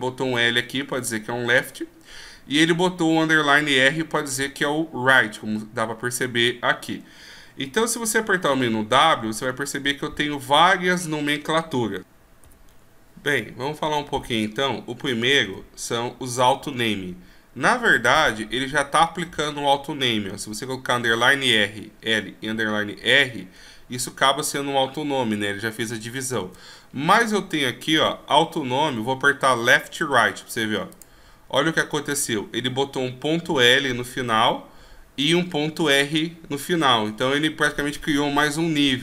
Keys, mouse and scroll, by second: 5.7-6.1 scroll up 1, 6.1 scroll down 1, 7.0 scroll down 1, 8.0 w, 15.6 w, 26.5 w.